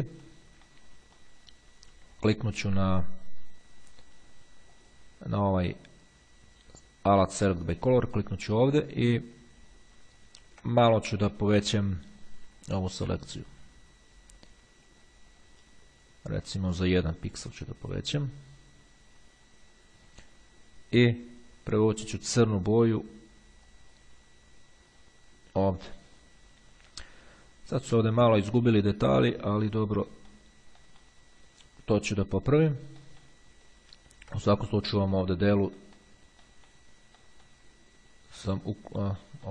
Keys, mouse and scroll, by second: 0.9-1.9 ctrl+drag, 4.9 click, 8.1 click, 9.8-10.8 ctrl+scroll up 1, 13.1 click, 15.5 click, 17.1 click, 23.9-25.7 drag, 29.5 click, 29.9 middle click, 30.3 middle click, 30.5-31.7 drag, 32.2 middle click, 32.4 click, 33.9-34.5 ctrl+scroll up 2, 35.2 click, 35.9 scroll up 1, 36.0 click, 36.1 middle click, 37.4 middle click, 37.5 click, 37.6 middle click, 39.4 middle click.